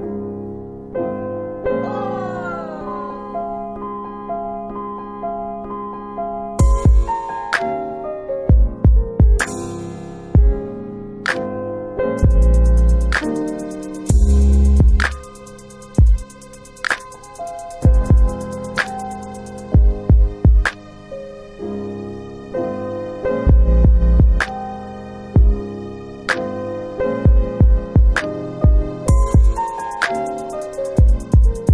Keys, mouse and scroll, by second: 4.8 click, 5.7 click, 6.5 click, 10.0 click, 12.5 click, 14.5 alt+click, 15.3 alt+right click, 15.6 alt+right click, 16.0 alt+click, 16.1 alt+click, 23.0 alt+click, 25.4 shift+right click, 29.2 shift+right click, 31.3 alt+click.